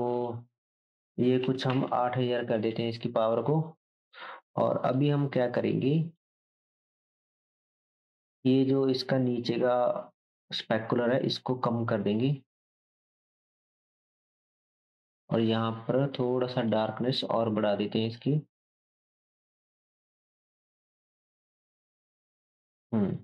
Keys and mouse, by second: 1.8 KP_0, 4.2-4.9 drag, 5.0-6.3 drag, 15.3-20.3 drag, 20.5-22.7 drag, 22.8-23.2 drag.